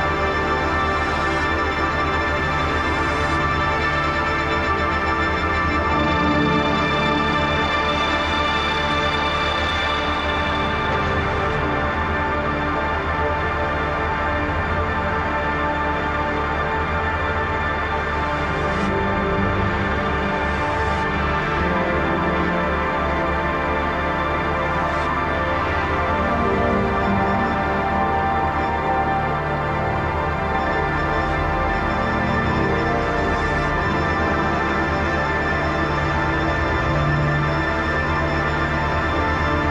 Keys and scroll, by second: 1.3 ctrl+i, 2.7 ctrl+z, 6.5 ctrl+d, 8.7 ctrl+s, 15.2 ctrl+z, 15.5 ctrl+z, 16.2 ctrl+z, 16.3 ctrl+z, 25.1 ctrl+j, 25.3 ctrl+t, 37.4 ctrl+t.